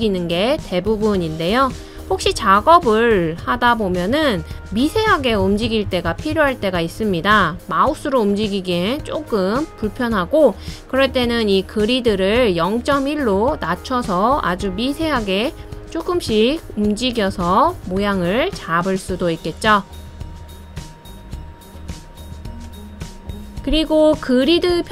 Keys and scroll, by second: 2.5 Left, 2.9 Left, 3.1 Left, 3.4 Left, 3.6 Left, 4.2 Down, 4.5 Down, 4.7 Down, 5.0 Down, 5.2 Down, 5.8 Up, 6.3 Up, 6.5 Up, 6.7 Up, 6.9 Up, 8.0 Left, 8.2 Left, 8.5 Left, 16.0 Left, 16.1 Left, 16.3 Left, 17.6 Down, 17.8 Down, 18.0 Down, 18.2 Down, 18.4 Down, 18.6 Down.